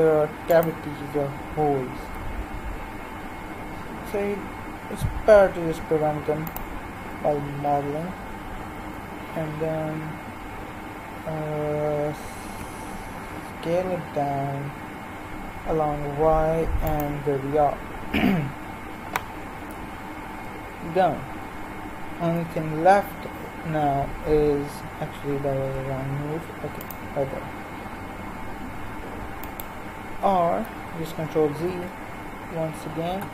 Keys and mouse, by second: 2.0 s, 7.6 KP_Decimal, 8.8 KP_3, 12.0 s, 22.2 ctrl+e, 25.4 ctrl+r, 30.4 ctrl+z, 31.6 ctrl+r.